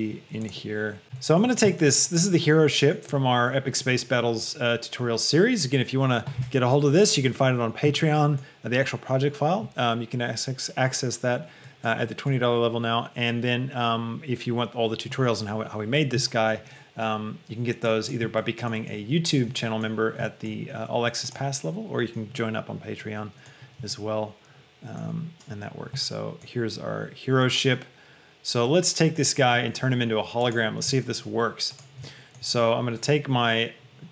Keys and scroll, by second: 1.0 g, 1.0 s, 1.8 shift+g.